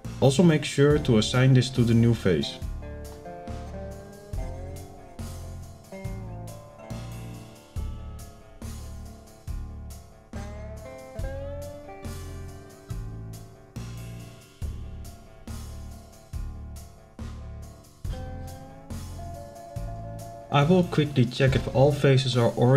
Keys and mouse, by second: 14.2 click, 21.5 click.